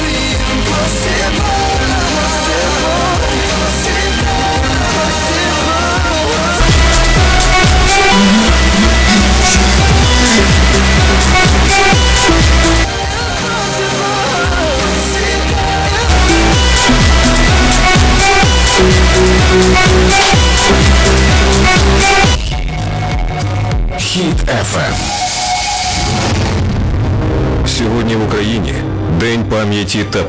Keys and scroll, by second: 13.0 Page_Down, 22.5 Page_Down.